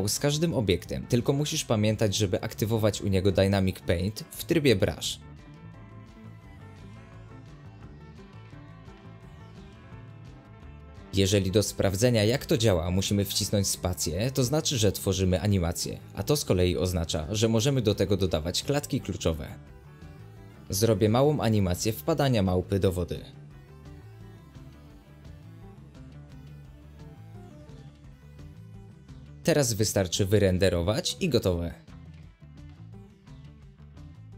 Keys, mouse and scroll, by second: 1.1 space, 1.6 g, 4.9 middle click, 5.3 space, 5.8 x, 7.2 shift+a, 7.4-8.1 shift+middle drag, 8.1 s, 8.9 middle click, 9.3 r, 10.9-13.5 drag, 13.5 middle click, 14.0 space, 14.3 click, 14.6 g, 15.4 click, 19.1 scroll down 1, 19.1-19.8 middle drag, 19.8 space, 20.7-21.1 drag, 21.1 scroll down 3, 21.3-22.5 middle drag, 22.5-24.5 drag, 24.5-29.2 middle drag, 29.2-30.1 drag, 30.1 z, 31.4 z, 31.6 middle click, 31.8 space.